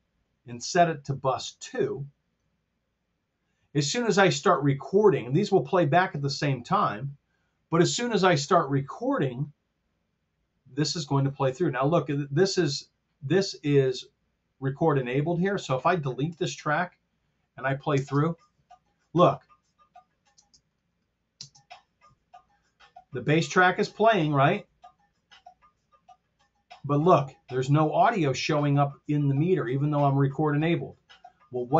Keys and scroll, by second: 16.3 BackSpace, 17.9 space, 20.3 space, 21.5 space.